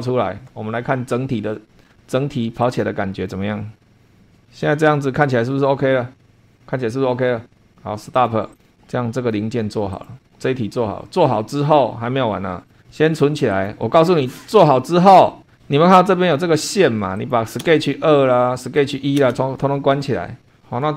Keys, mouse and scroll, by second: 2.6 click, 8.1 click, 8.5 click, 8.7 click, 9.9 click, 12.7 click, 13.5 click, 14.8 scroll up 1, 17.1 click, 17.6 space, 18.8 click, 19.2 space.